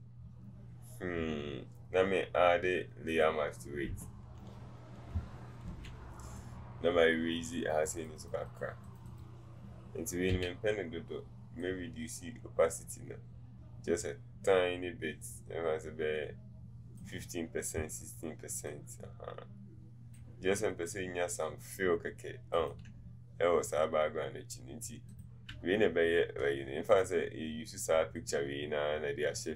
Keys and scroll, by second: 5.7 b, 10.4 v.